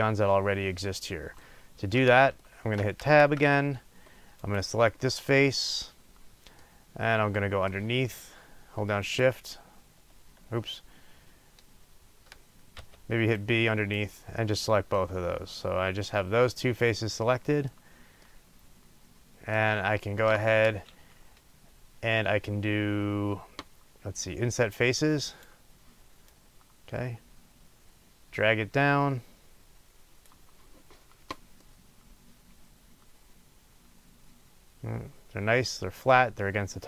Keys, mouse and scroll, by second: 1.4-3.2 middle drag, 3.8-4.4 scroll down 1, 4.4 click, 6.6 middle click, 7.1-7.7 right drag, 9.3 shift+click, 14.9 middle click, 16.5-17.2 right drag, 25.3 click, 26.5 click, 31.7-35.6 middle drag, 36.3-36.8 middle drag.